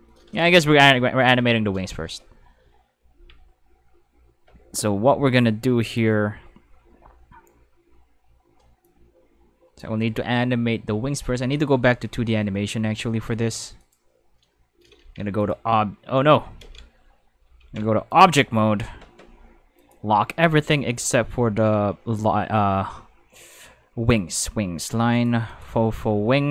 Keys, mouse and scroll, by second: 0.4 right click, 3.1 Tab, 5.8 click, 8.8 click, 11.5 click, 12.8 middle click, 13.8 click, 15.0 ctrl+Tab, 16.6 ctrl+z, 17.6 ctrl+Tab, 18.1 click, 19.8 click, 25.1 click, 25.5 click, 26.2 middle click.